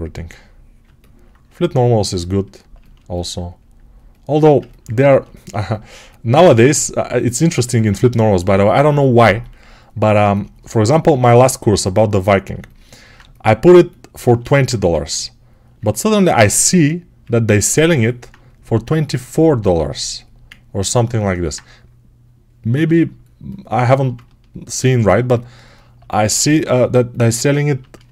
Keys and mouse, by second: 3.2-5.4 right drag, 5.8-28.1 right drag, 10.9 g, 14.6 1.